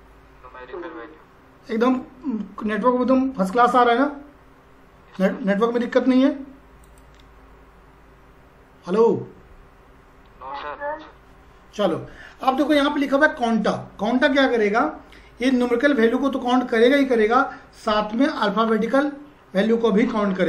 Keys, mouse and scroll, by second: 6.8 click.